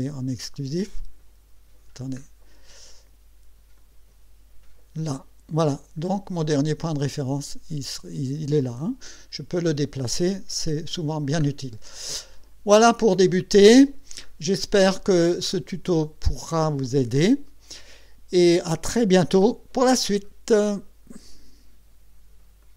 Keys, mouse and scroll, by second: 0.1 click, 2.0 scroll up 2, 3.8 click, 5.1 click, 6.0-6.4 scroll up 2, 6.6 scroll up 2, 11.4-12.5 scroll down 6, 12.5 scroll up 2, 13.3 middle click, 14.3 scroll up 2.